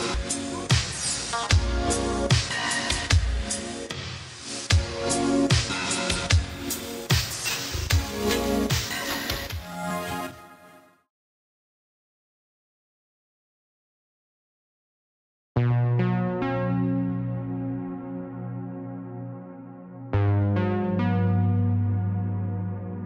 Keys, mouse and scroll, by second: 0.8 space, 4.1 BackSpace, 7.4 space, 9.3 typing, 12.9 typing, 16.8 space, 19.1 typing, 21.6 typing.